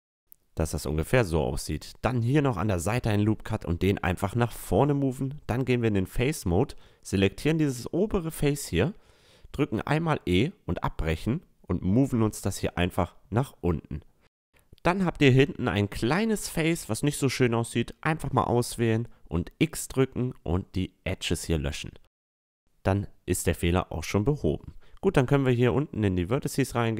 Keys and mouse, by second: 0.6 middle click, 1.0-3.4 drag, 1.4 ctrl+r, 3.6 a, 3.8 click, 4.7-5.4 middle drag, 5.4-7.3 drag, 6.1-8.1 right drag, 8.1 middle click, 9.1 e, 10.9-12.7 drag, 16.4 middle click, 17.3-19.3 right drag, 18.4-19.5 drag, 19.5 ctrl+z, 19.5 x, 19.8 x, 22.1 middle click, 22.6 middle click, 22.8 middle click, 23.0 middle click, 25.3-26.3 middle drag, 26.3-26.9 drag.